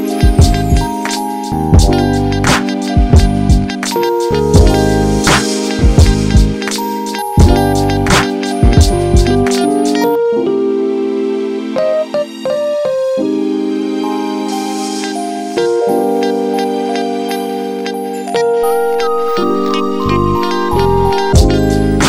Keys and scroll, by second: 4.2-6.3 typing.